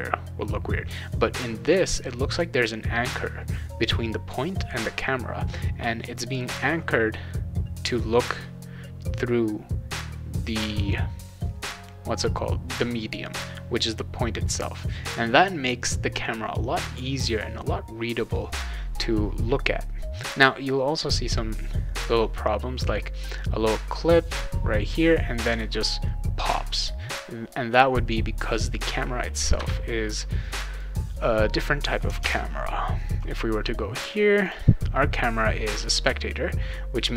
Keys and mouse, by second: 30.7 click, 32.2 alt+Tab, 34.4 click.